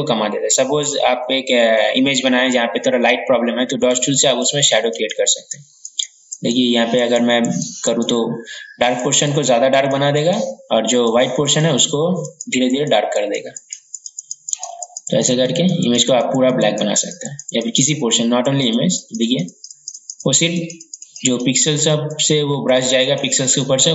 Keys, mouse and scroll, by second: 14.9-23.9 drag.